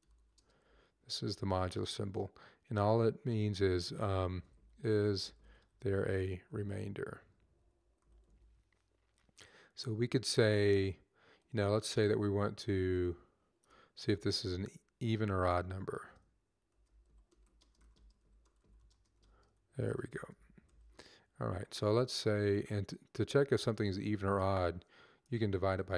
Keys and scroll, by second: 0.0 /, 0.8 %, 3.9-8.5 typing, 13.9 typing, 16.2-21.1 typing, 21.4 Up, 22.0 Up, 22.0 Left, 22.2-25.9 typing.